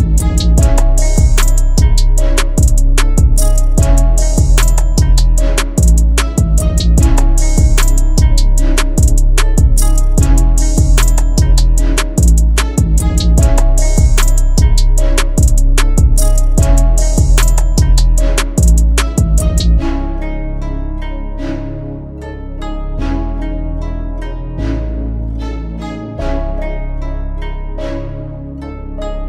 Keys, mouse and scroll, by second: 19.1 double click, 20.3-20.9 typing.